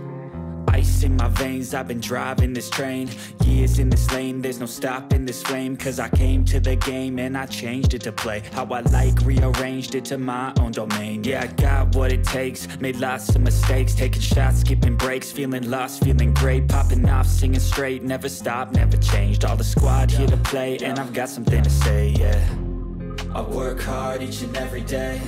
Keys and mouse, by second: 0.0-2.6 typing, 5.7-7.2 drag, 5.7-7.2 right drag, 8.0 click, 8.0 right click, 8.8 g, 9.1 g, 9.2 g, 9.7 g, 16.6-19.0 drag, 19.1-22.2 drag.